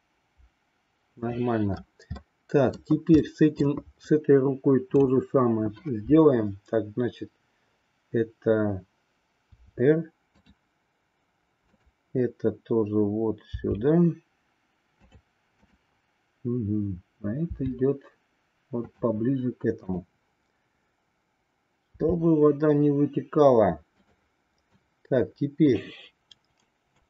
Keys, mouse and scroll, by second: 2.2 middle click, 3.1 middle click, 4.9-6.0 drag, 9.4 r, 11.7-13.0 drag, 13.5 r, 15.7-16.9 drag, 17.4 r, 19.9-21.3 drag, 21.9 r, 24.7-25.7 drag.